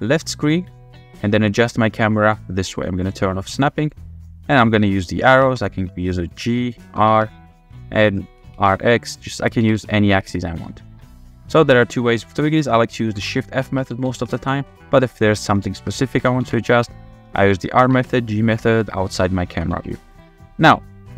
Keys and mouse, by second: 1.3 click, 3.0 click, 3.6 click, 4.7-5.0 drag, 5.2 g, 5.4 z, 6.5 click, 6.9 r, 7.0 x, 8.4-9.7 typing, 9.0 click, 13.1-14.1 typing, 14.3 click, 14.9-15.2 drag, 15.7 shift+click, 16.2-17.9 typing, 18.7-19.0 middle drag, 19.5 g, 19.7 z.